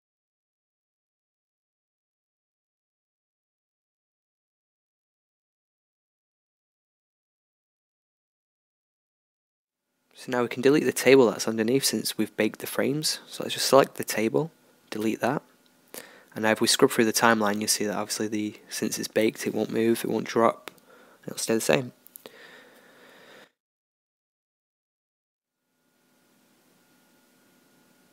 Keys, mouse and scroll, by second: 0.6-2.8 middle drag, 4.8-6.8 drag, 7.3-9.6 drag, 9.6-10.8 middle drag, 10.8-12.6 right drag, 12.0 g, 14.4 x, 17.2-19.0 drag, 19.7-21.7 drag, 26.1-28.1 middle drag.